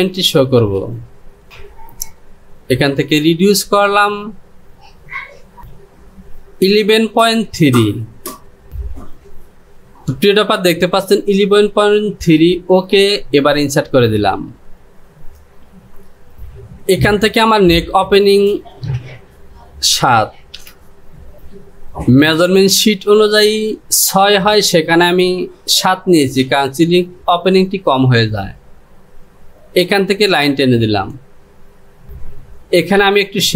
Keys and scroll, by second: 0.8 space, 20.2 KP_7.